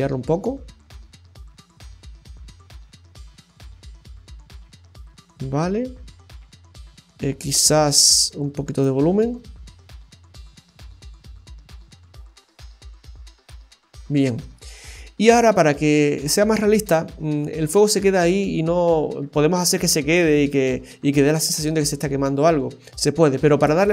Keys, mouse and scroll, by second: 5.3 space, 8.1 click, 9.2 space, 16.7-17.2 scroll up 2, 17.2 space, 23.5 space.